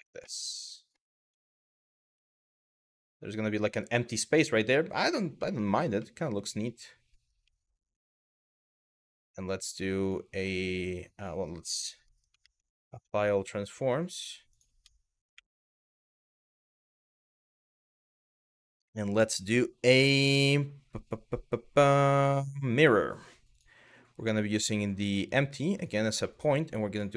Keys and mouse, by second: 0.0-0.6 middle drag, 1.4 middle drag, 2.3-4.2 middle drag, 5.0-5.4 middle drag, 5.6-6.1 middle drag, 7.1-7.7 middle drag, 9.6-10.7 drag, 10.8 click, 11.2 click, 11.8 middle click, 12.0 shift+a, 15.0 ctrl+a, 17.2 click, 21.6-23.3 drag, 24.1 click, 26.5 click, 26.9 click.